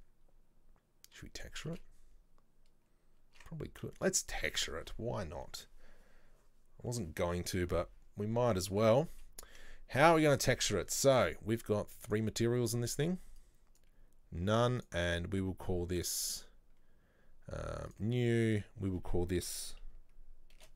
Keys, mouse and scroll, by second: 8.1 scroll up 1, 8.6-9.7 middle drag, 9.7-10.1 scroll down 1, 10.1 Tab, 10.4 middle click, 10.9-12.3 scroll up 1, 12.3-13.6 scroll up 1, 13.6-14.6 scroll up 1, 14.6-15.0 scroll up 1, 15.0 drag, 18.0 click.